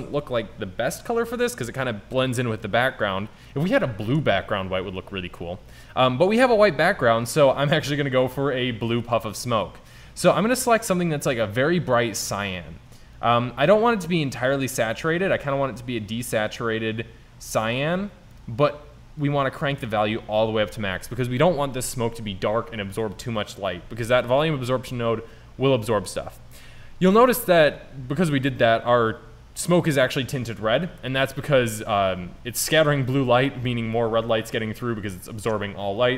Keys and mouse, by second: 6.3 middle click, 6.8-9.1 middle drag.